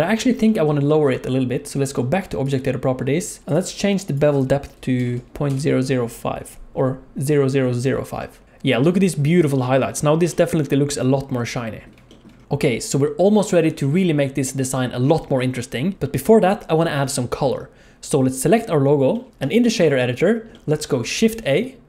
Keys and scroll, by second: 21.0 shift+a.